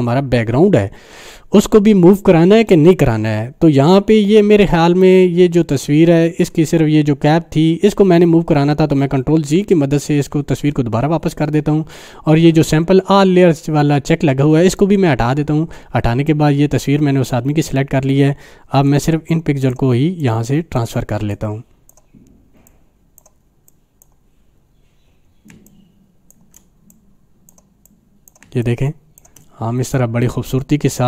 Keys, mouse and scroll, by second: 9.0 ctrl+Num_Lock, 9.3 ctrl+alt+z, 15.1 click, 18.9-19.8 drag, 25.5 space, 25.7 click, 26.0-26.6 space, 26.9 click, 26.9-27.5 click, 28.0-28.5 click, 28.4 space, 28.6 click, 28.9-29.2 space, 29.2 space, 29.9-31.0 drag.